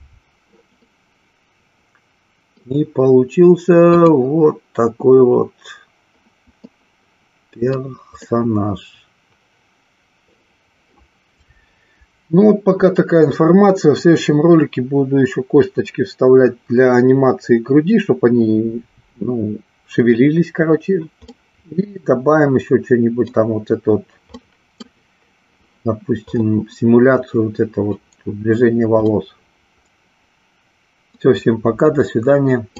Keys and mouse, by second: 0.9-2.6 middle drag, 3.9 click, 6.8-7.8 middle drag, 8.3-10.2 middle drag, 21.3-23.3 middle drag, 24.4-24.9 middle drag, 29.1-31.2 middle drag.